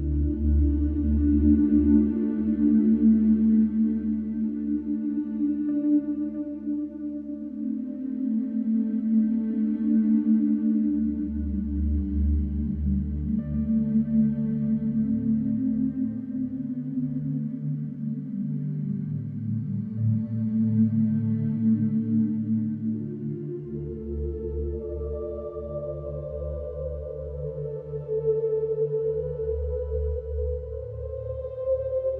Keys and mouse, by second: 0.0-4.0 drag, 6.2 alt+click, 7.2 alt+click, 8.2 alt+click, 9.3 alt+click, 11.4 click, 13.0-14.2 drag, 16.4 ctrl+z, 18.9-28.1 alt+drag, 30.7 ctrl+z.